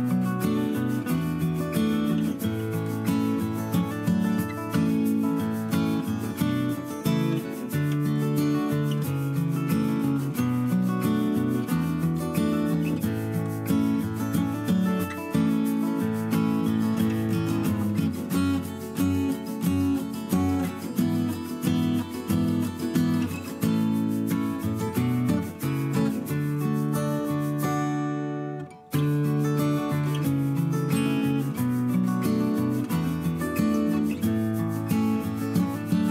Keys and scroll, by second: 3.8 ctrl+z, 4.5 Delete, 8.2 Down, 8.5 Up, 8.6 Down, 9.1 Up, 9.3 Down, 9.6 Up, 9.8 Down, 9.9 Up, 12.4 ctrl+x, 12.6 ctrl+v, 20.9 ctrl+x, 21.2 ctrl+shift+v, 22.6 Left, 22.7 Right, 22.9 Left, 23.0 Right, 24.4 Right, 24.8 Left, 28.0 ctrl+c, 28.2 ctrl+shift+v, 31.8 Delete, 32.8 Down, 33.8 Down, 34.3 ctrl+=, 34.5 space.